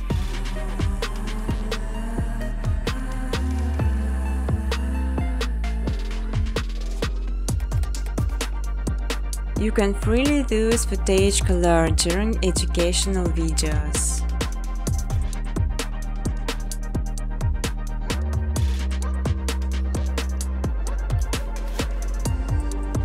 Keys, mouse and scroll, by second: 0.0-2.0 typing, 0.7 click, 1.7 click, 3.7 space, 4.0 space, 4.9 space, 6.0-6.5 scroll, 6.9 click, 7.3 scroll, 8.0 click, 8.5 right click, 9.5-9.8 scroll, 9.8 click, 10.6 click, 12.4-15.7 typing, 17.1 click, 18.0 click, 18.5 typing.